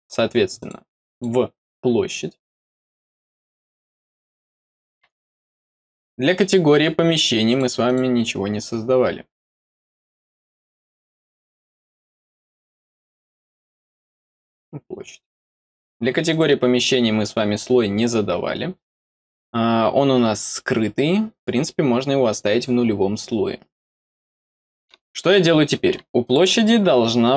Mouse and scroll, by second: 0.5 click, 1.0 click, 2.0 middle click, 3.5 click, 5.8 click, 7.4 click, 7.8 click, 9.4 middle click, 10.0 middle click, 11.0 middle click, 11.7 middle click, 12.9 middle click, 14.1 click, 16.2 click, 26.1 click.